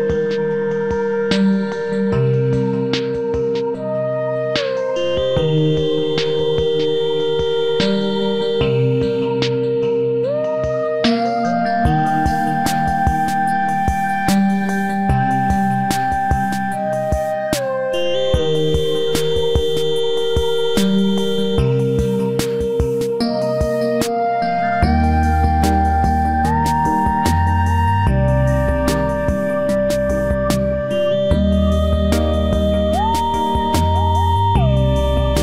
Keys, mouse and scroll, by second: 0.2 b, 0.5 g, 2.9 ctrl+s, 6.1 ctrl+r, 6.2 middle click, 6.7-8.8 drag, 7.7-8.7 right drag, 9.2 g, 9.4-10.5 right drag, 15.5-17.4 middle drag, 17.2 ctrl+r, 27.4 ctrl+r, 32.0-33.7 right drag, 33.3 ctrl+r.